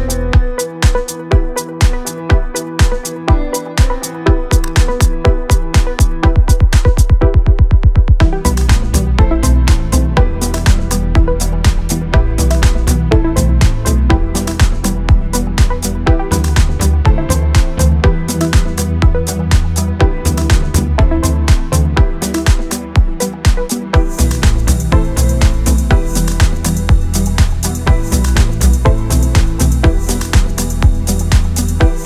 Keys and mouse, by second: 0.0 click, 0.2 shift+middle click, 0.3 shift+middle click, 0.5 click, 0.6 g, 0.8 click, 1.4 shift+middle click, 3.0-7.3 typing, 3.0 click, 3.4 click, 3.5 click, 3.8 click, 4.1 right click, 4.3 right click, 4.6 click, 5.2 shift+middle click, 5.8 middle click, 6.1 middle click, 6.4 middle click, 6.6 middle click, 6.9 middle click, 7.1 click, 7.1 right click, 7.4 right click, 7.8 middle click, 8.2 right click, 8.3 middle click, 8.5 KP_1, 9.3 middle click, 9.7 KP_1, 10.9-15.1 typing, 10.9 click, 11.2 right click, 11.5 right click, 11.8 shift+middle click, 11.9 shift+click, 12.0 middle click, 12.2 middle click, 12.4 click, 12.5 shift+middle click, 12.8 click, 13.1 shift+middle click, 13.9 click, 14.1 middle click, 14.6 shift+middle click, 15.0 shift+middle click, 15.2 shift+middle click, 15.4 click, 15.8 click, 16.3 middle click, 16.5 KP_1, 17.4 middle click, 17.6 middle click, 17.8-22.6 typing, 18.8 click, 19.4 click, 19.9 shift+middle click, 19.9 click, 20.2 click, 20.3 click, 20.5 click, 20.6 click, 21.2 middle click, 21.5 shift+middle click, 21.8 click, 22.5 shift+click, 22.7 shift+middle click, 23.0 ctrl+z, 23.1 shift+middle click, 24.0-28.9 typing, 24.0 click, 24.2 click, 24.4 click, 24.9 click, 25.2 click, 25.5 click, 26.6 ctrl+z, 26.6 click, 27.0 click, 27.2 right click, 27.4 ctrl+z, 28.0 ctrl+shift+z, 28.0 shift+middle click, 28.5 click, 29.6 shift+middle click, 30.1 e, 30.6 middle click, 30.9 click, 31.1 middle click, 31.4 middle click, 31.6 middle click, 32.0 middle click.